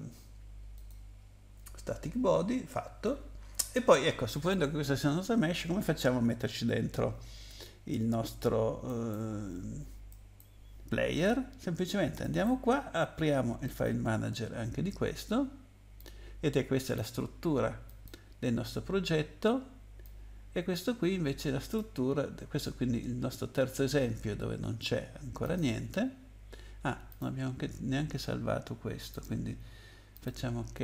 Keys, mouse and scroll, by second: 0.7 click, 8.8 right click, 10.1 right click, 12.2 right click, 13.6 click, 16.0 click, 17.8 click, 20.0 click, 25.4 click, 27.1 click, 29.1 click, 30.4 click.